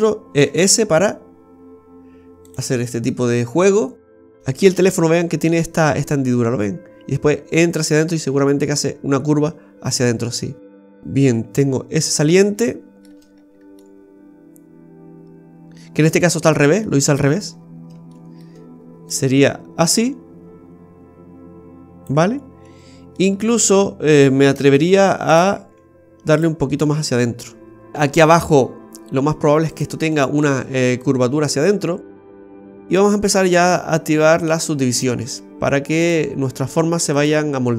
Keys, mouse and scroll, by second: 0.3 e, 3.0 middle click, 3.7 middle click, 4.4 shift+middle click, 4.4 scroll up 8, 4.5 shift+middle click, 10.8 scroll down 2, 11.5-12.3 scroll down 1, 12.3 scroll down 2, 12.6 shift+middle click, 13.2-13.9 scroll up 4, 13.8 middle click, 14.6 middle click, 16.5 scroll up 2, 16.8 shift+middle click, 17.5-17.9 scroll up 5, 18.1 shift+middle click, 19.1 click, 22.8 scroll down 1, 23.1 middle click, 24.7 shift+s, 25.5 s, 26.7 middle click, 27.5 middle click, 27.9 shift+middle click, 28.3-29.1 scroll up 4, 29.7 right click, 30.1 middle click, 31.0 click, 34.9 click, 36.0 click.